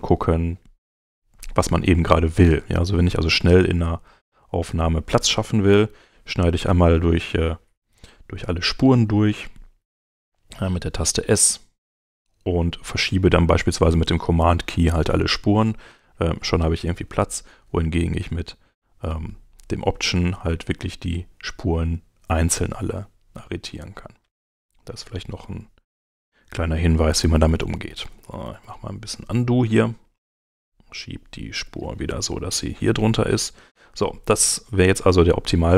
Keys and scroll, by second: 5.7 s, 7.8 Escape, 10.0 s, 27.2 super+z.